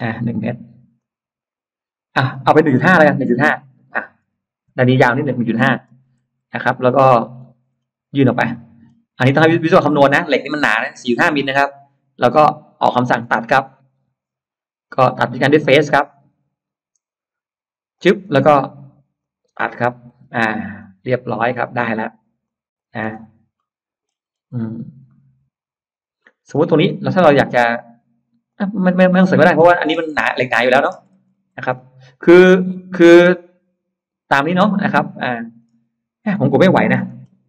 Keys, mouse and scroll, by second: 0.5 scroll up 2, 0.8 click, 3.3 1, 4.1 5, 4.5 Return, 5.7 space, 6.5 click, 7.0-7.6 scroll up 1, 7.6-8.2 scroll down 2, 8.4 middle click, 8.6-9.0 scroll down 2, 9.1 middle click, 9.6 scroll down 2, 9.8 scroll up 1, 10.0 middle click, 15.6 click, 16.4-17.4 scroll up 2, 17.8 click, 19.0 click, 19.7 middle click, 20.1 scroll down 2, 20.5 e, 20.6 click, 21.5 click, 22.3 click, 23.0 space, 23.1-23.4 scroll up 1, 23.4 middle click, 24.1-24.8 scroll up 4, 24.9-26.3 middle drag, 26.4 scroll down 1, 26.6 space, 28.3 click, 28.8 middle click, 29.4-30.0 scroll down 3, 30.0 middle click, 30.7-31.0 scroll down 2, 31.2 scroll up 2, 31.6-35.4 middle drag, 36.8-37.1 scroll up 1, 37.3 ctrl+z.